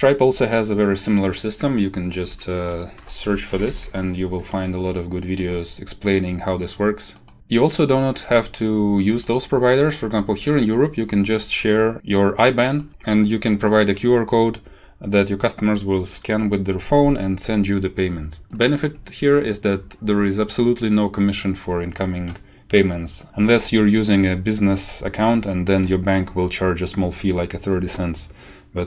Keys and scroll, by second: 3.1 ctrl+c, 3.4 ctrl+t, 3.6 ctrl+v, 3.7 Return.